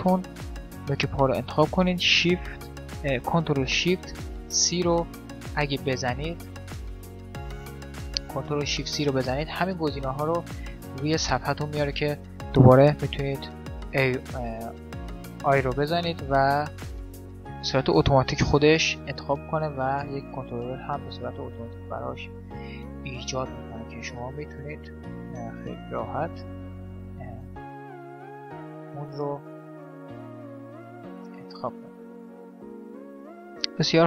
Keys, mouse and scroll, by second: 0.7 right click, 6.2 ctrl+shift+c, 7.7 ctrl+shift+c, 15.6 right click, 17.5 right click, 18.8-20.5 right drag, 23.7-25.1 right drag, 25.1 middle click, 25.5-26.5 drag, 26.5 middle click, 26.5 right click, 27.6 click, 27.7 right click, 28.5 right click, 29.6 click, 30.2 click, 31.4 right click, 31.9 Delete, 33.4 x.